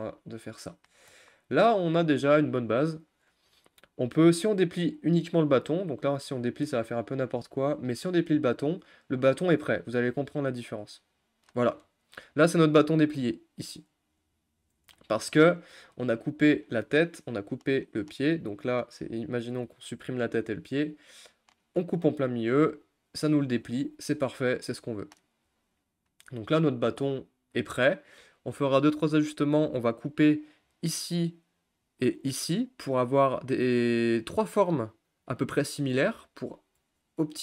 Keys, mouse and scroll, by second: 0.9-1.3 shift+scroll up 1, 1.3-1.8 scroll down 5, 1.8 middle click, 2.6-3.1 scroll up 3, 3.1-6.7 shift+middle drag, 6.7 a, 8.9-11.2 shift+middle drag, 11.2 u, 13.3 click, 14.3 click, 15.0 middle click, 15.3-15.6 scroll up 2, 15.6-27.0 middle drag, 27.0-37.4 scroll down 4.